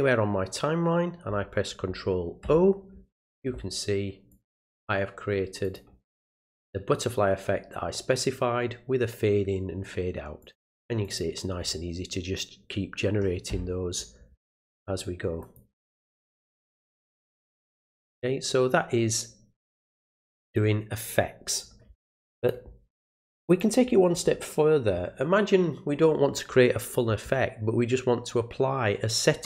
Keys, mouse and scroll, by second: 4.3 click, 5.6 click, 10.4 click, 11.0 click, 15.4 click, 19.1 click, 20.4 click, 22.4 click, 23.5 click.